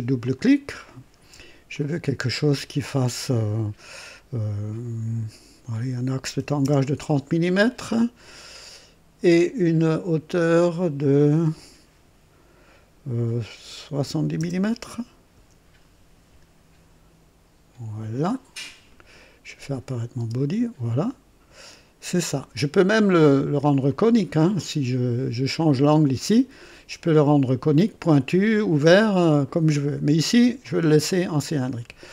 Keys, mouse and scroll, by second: 0.2 click, 1.7 click, 6.3 KP_3, 6.8 KP_0, 9.9-11.2 drag, 13.9 KP_7, 14.3 KP_0, 15.3 KP_Enter, 19.8 click, 20.2 space, 23.6 click, 30.6 click.